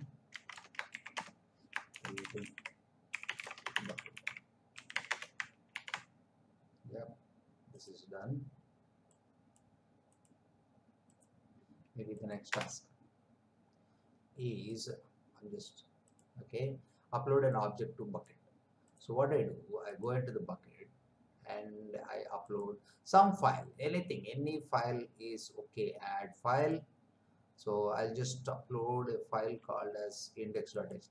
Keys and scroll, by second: 0.0-4.9 typing, 5.0 Return, 5.7 ctrl+v, 12.4 Return.